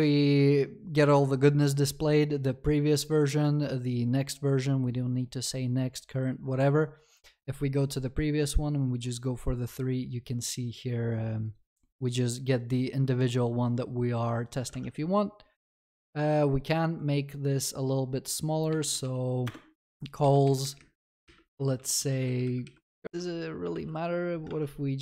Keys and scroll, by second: 19.5 Return, 20.2 Escape, 21.5 Escape, 22.0 ctrl+s, 23.0 ctrl+v, 23.1 ctrl+BackSpace.